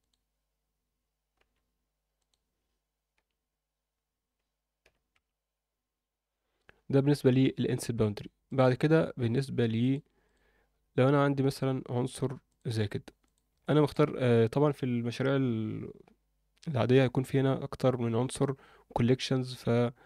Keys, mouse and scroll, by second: 0.0 click, 1.4 e, 3.1 i, 6.6 Tab, 8.5 click, 9.8 click, 11.7-12.5 scroll down 1, 12.5 click, 13.2 click, 13.6 alt+shift+middle drag.